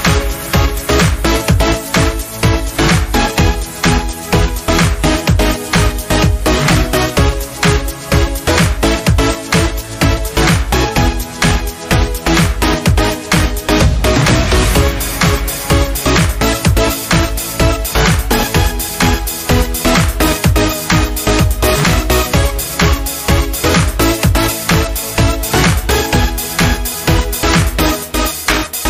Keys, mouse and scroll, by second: 5.3-10.5 drag, 10.5 scroll up 1, 11.9 click, 14.2 click, 16.2 Delete, 18.6 click.